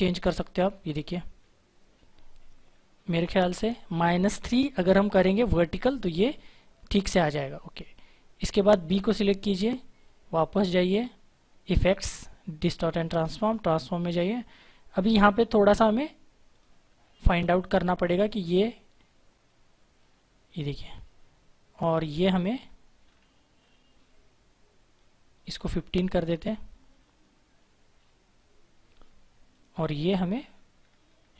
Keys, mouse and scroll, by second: 7.6 click, 11.6 click, 16.4 click, 16.8-17.6 scroll up 1, 18.1 click, 18.9-21.8 scroll up 1, 21.8 click, 22.2-23.0 scroll down 1, 25.4 click, 25.7-28.3 scroll up 1, 29.4 click, 29.8-31.3 scroll down 1.